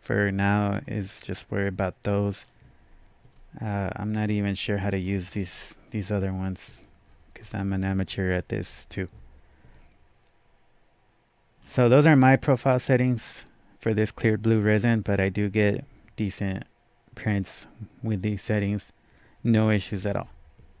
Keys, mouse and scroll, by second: 0.7 scroll down 3, 2.1-3.3 scroll down 2, 3.3-4.2 scroll up 1, 4.2-5.0 scroll up 1, 5.0-7.0 scroll down 2, 7.0-8.2 scroll up 6, 8.7-10.5 scroll up 1, 11.6 scroll down 1, 18.6-18.9 scroll down 1, 19.9-20.8 scroll up 2.